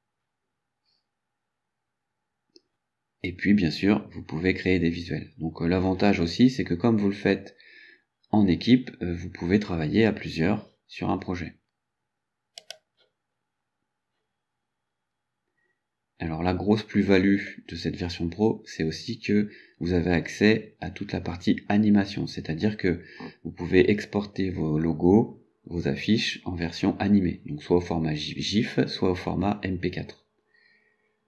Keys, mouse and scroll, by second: 12.7 click.